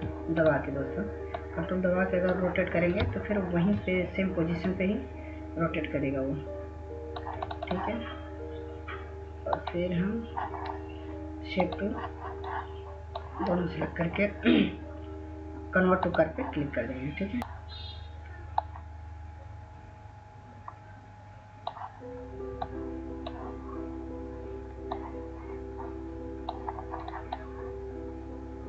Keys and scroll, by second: 17.4 ctrl+z.